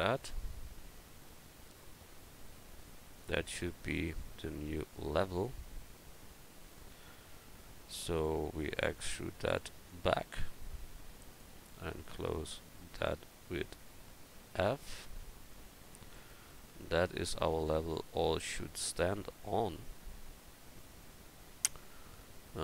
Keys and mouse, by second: 7.7-8.8 right drag, 8.8 e, 9.9-12.0 right drag, 14.6 f, 15.2 Tab, 20.0 Tab.